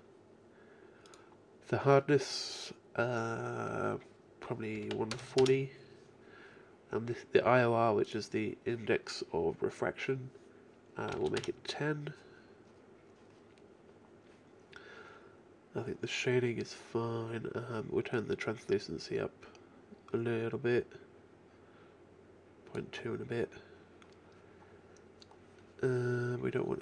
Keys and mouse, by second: 2.2 click, 8.1-10.6 drag, 13.0-14.2 middle drag, 15.4-17.8 middle drag, 18.2-20.0 drag, 20.0-23.8 middle drag.